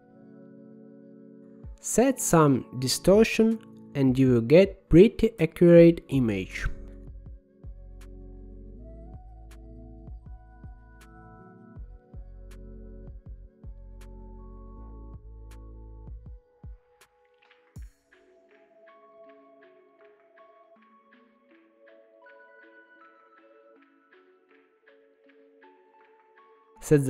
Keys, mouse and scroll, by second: 1.4-15.4 drag, 16.0-19.8 drag, 20.0-21.9 middle drag, 21.9 scroll down 2, 22.2-26.7 middle drag, 26.7-27.0 scroll up 1.